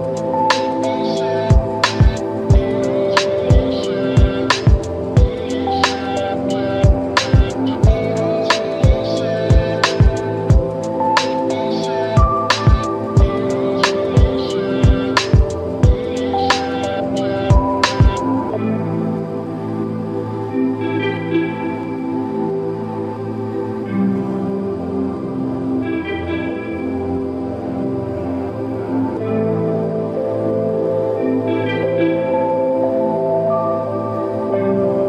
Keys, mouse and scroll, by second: 0.0 alt+middle click, 0.2 alt+right click, 0.3 alt+click, 1.7-2.9 right drag, 3.4 click, 6.4-7.6 right drag, 8.1 click, 12.5-13.1 drag, 13.7 3, 14.0-15.7 right drag, 16.2 click, 16.2 click, 18.9 click, 20.0 alt+right click, 20.3 alt+middle click, 20.4 alt+right click, 20.5 alt+middle click, 20.7 alt+right click, 20.9 alt+middle click, 21.2-21.6 right click, 21.8 click, 22.3 shift+click, 22.8 ctrl+z, 23.2 click, 27.4 click, 28.0-28.5 scroll down 1, 28.6-29.0 alt+drag, 30.7-31.4 scroll up 1, 31.8 click, 32.1-33.1 right drag, 33.7 click.